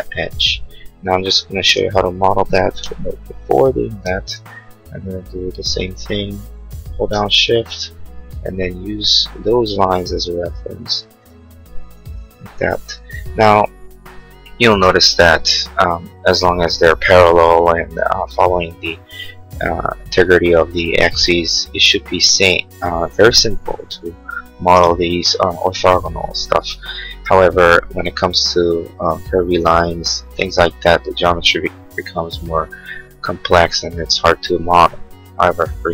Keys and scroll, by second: 3.0 m.